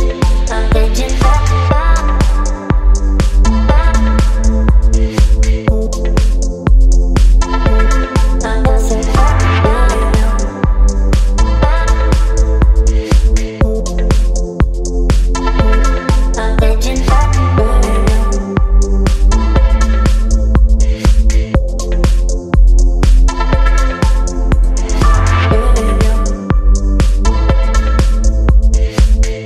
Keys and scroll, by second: 1.1 Return, 2.3 space, 3.6 space, 16.8 space, 18.6 ctrl+t, 20.7 Return, 25.0 Down, 26.1 space.